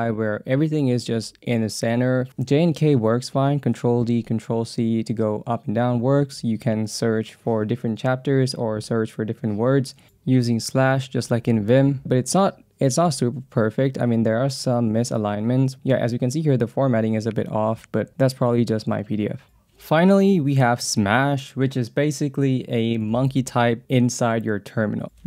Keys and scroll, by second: 1.3-5.9 typing, 2.5 ctrl+d, 6.3 Return, 6.9-10.2 typing, 11.3 j, 12.0 j, 13.6-18.5 typing, 23.4 Down, 24.1 Down.